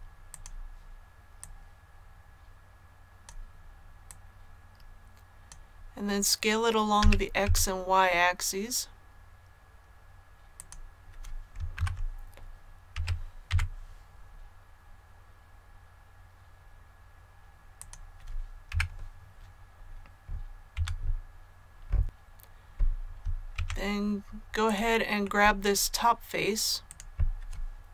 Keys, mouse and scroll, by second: 0.2-5.8 drag, 6.9-7.3 typing, 10.5 click, 11.7 KP_3, 12.9-13.4 typing, 17.7 click, 18.6 KP_1, 20.6 a, 22.0 click, 23.4 Tab, 24.5 click, 25.1 middle click, 26.8 right click, 27.8 KP_1.